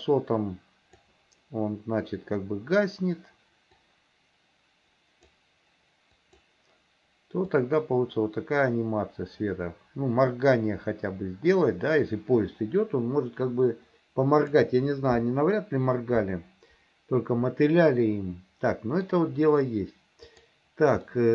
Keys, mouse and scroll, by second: 3.9-5.3 drag, 6.2 click, 7.7-14.6 drag, 18.0-19.1 middle drag, 20.3 click, 21.1 middle click.